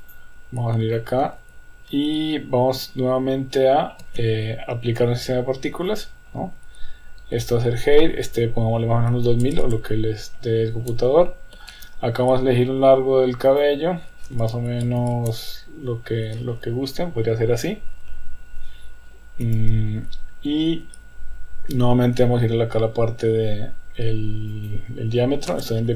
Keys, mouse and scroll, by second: 0.0 click, 1.0 shift+middle click, 1.4 Tab, 4.0 ctrl+s, 6.0 click, 7.4 click, 8.3-12.4 drag, 9.6 KP_0, 13.5-15.8 drag, 17.7-18.7 middle drag, 19.4 KP_1, 24.5-25.9 drag.